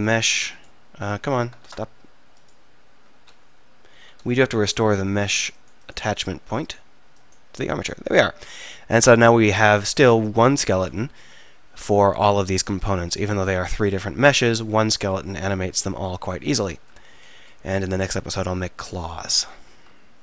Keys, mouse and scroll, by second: 1.3 z, 1.7 Tab, 3.3 z.